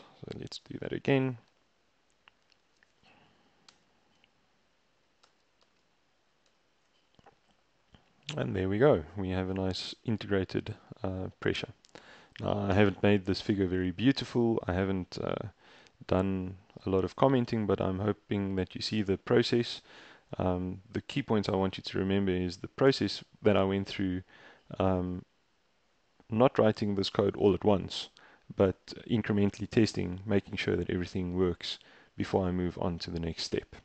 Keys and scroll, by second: 3.8 BackSpace, 5.3 shift+Return, 5.7 shift+Return, 6.5 shift+Return.